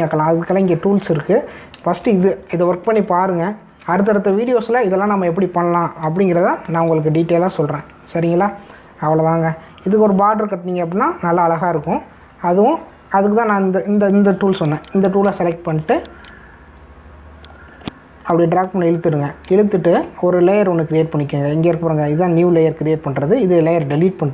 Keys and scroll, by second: 3.0 ctrl+-, 7.4 ctrl+-.